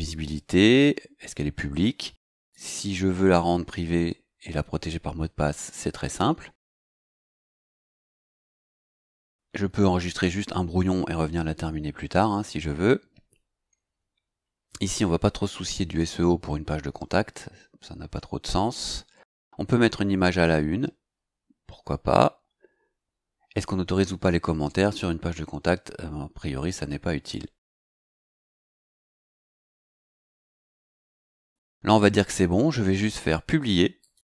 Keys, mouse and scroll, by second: 2.4 click, 7.4 click, 12.9-13.2 scroll down 2, 15.3-15.6 scroll up 2, 17.3 scroll down 2, 17.9 scroll down 2, 19.2 scroll down 2, 22.8 scroll down 1, 31.2 click, 32.1-32.9 scroll up 2, 34.0 click.